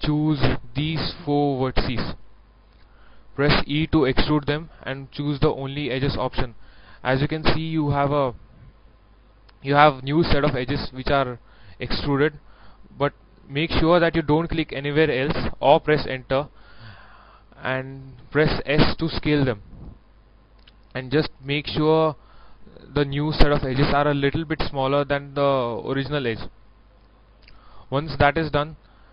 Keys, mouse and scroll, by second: 0.6 shift+right click, 1.2 shift+right click, 1.9 shift+right click, 2.6 shift+right click, 3.7 shift+e, 5.7 click, 18.8 s, 26.9 click, 27.5-29.1 middle drag.